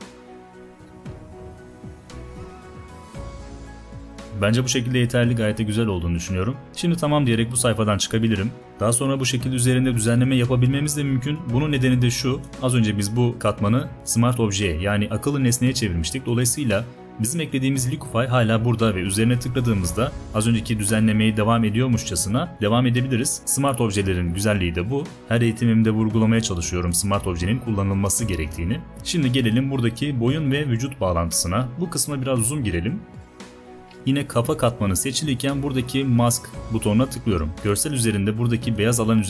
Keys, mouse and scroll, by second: 31.3 space, 31.8 click, 32.6 click.